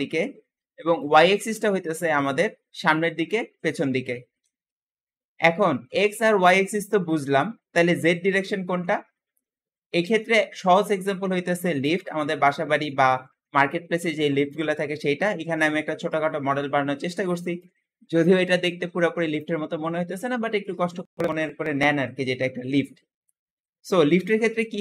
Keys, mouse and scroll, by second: 8.7-10.9 shift+middle drag, 10.9-11.7 scroll up 2, 11.7-14.2 middle drag, 14.2 click.